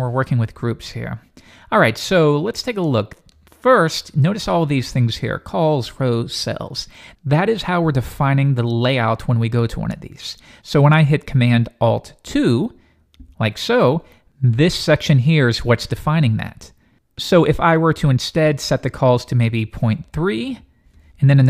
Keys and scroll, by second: 13.1 alt+super+2.